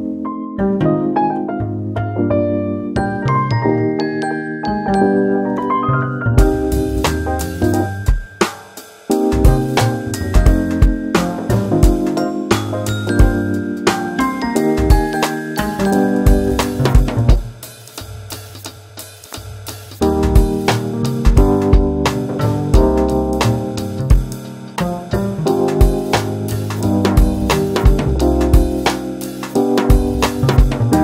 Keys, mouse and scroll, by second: 0.1 s, 1.7-2.0 scroll up 2, 2.0-2.6 middle drag, 2.6 scroll down 3, 2.9 middle click, 3.1 Tab, 5.2 ctrl+r, 11.4 click, 11.8-13.0 middle drag, 13.0 ctrl+r, 15.5 click, 15.9-17.2 scroll down 1, 17.2 3, 17.5 click, 17.9 shift+click, 18.2 shift+click, 18.9 shift+click, 19.2 shift+click, 19.5 shift+click, 20.4 e, 22.5 s, 24.6-26.0 middle drag, 26.0 click, 27.8 middle click, 28.4 shift+click, 28.8-29.3 scroll down 1, 29.3-30.4 middle drag, 30.4 KP_3.